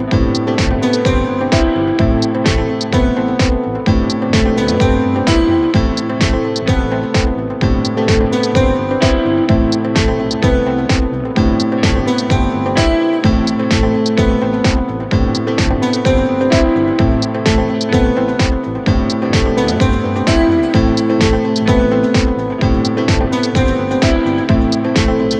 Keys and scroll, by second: 4.8 c, 10.3 c.